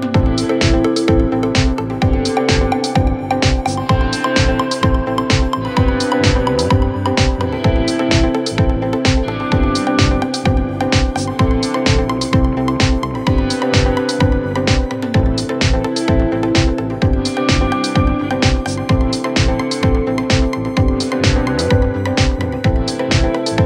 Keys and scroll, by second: 3.7 w, 5.1 d, 7.4 f, 16.9 ctrl+q, 19.9 KP_Add, 20.8 w, 22.2 d, 23.0 w.